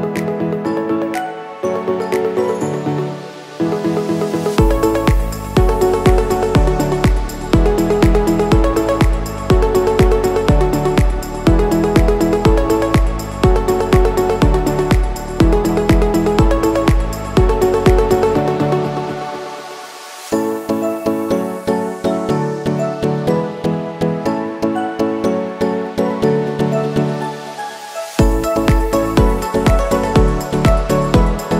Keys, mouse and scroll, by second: 0.1 ctrl+t, 0.9 click, 2.1 Return, 2.7-4.3 drag, 4.3 scroll down 1, 5.5 scroll up 1, 5.9 space, 6.1 click, 6.6 space, 6.7 scroll up 1, 6.8 scroll down 1, 8.4-18.7 drag, 18.7 Return, 19.3-21.2 drag, 21.9 scroll down 1, 22.7-24.0 scroll up 1, 24.0 click, 25.8 scroll up 1, 27.4 scroll down 1, 28.8 click, 29.4 scroll up 1.